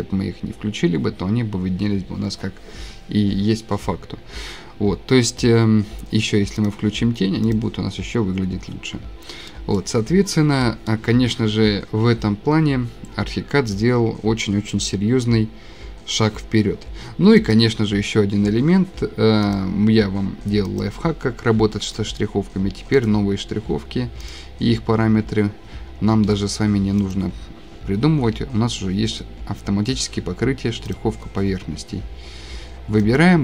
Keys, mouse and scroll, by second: 5.0-5.7 scroll, 5.7 scroll, 7.5 click, 9.1 click, 9.1 click, 9.2 click, 9.7 click, 9.8 scroll, 10.3 scroll, 12.7 scroll down 3, 15.1-15.4 scroll, 15.5 scroll down 1, 15.6-15.9 scroll, 15.9 middle click, 17.5 click, 19.6 click, 20.8 click, 21.6 Escape, 22.1 click, 22.2 click, 22.2 click, 23.1 click, 24.3 click, 24.3 scroll, 27.1 click, 30.9 click, 33.2 click.